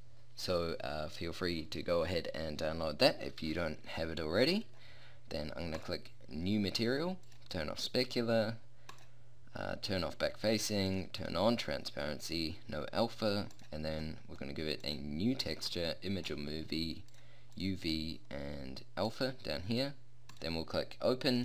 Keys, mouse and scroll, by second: 4.4-5.7 drag, 5.9-6.7 drag, 7.4-10.7 drag.